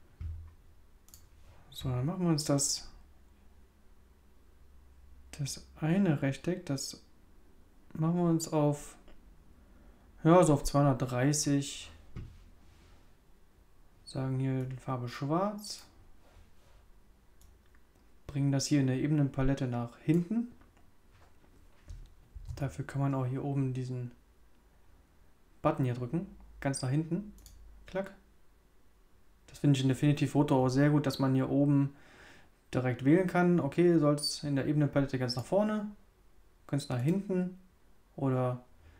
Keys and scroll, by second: 22.3 super+z.